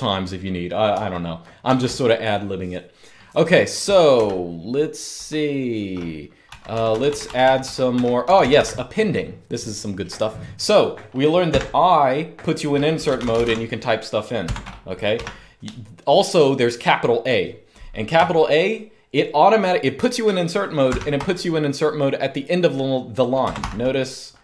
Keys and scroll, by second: 1.4 ctrl+d, 3.9 ctrl+u, 6.2-8.8 typing, 11.2 i, 12.5-13.7 typing, 14.3 Escape, 14.9 u, 20.6 shift+a, 23.3 Escape, 23.3 u.